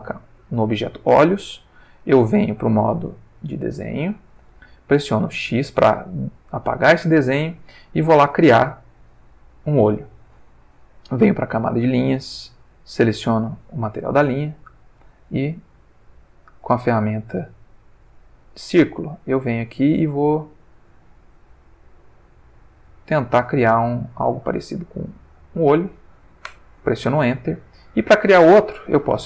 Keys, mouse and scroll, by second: 2.5 click, 3.6 click, 5.3 x, 5.9 click, 7.4 ctrl+middle click, 11.4 click, 12.4 click, 13.1 click, 14.8 click, 15.8-19.0 drag, 19.7-21.1 drag, 21.5-25.6 drag, 26.5 Return.